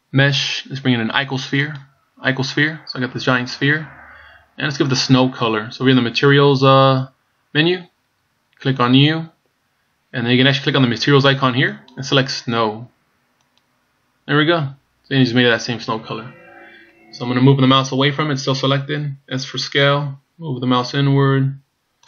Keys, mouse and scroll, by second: 8.8 click, 11.8 click, 19.8 s.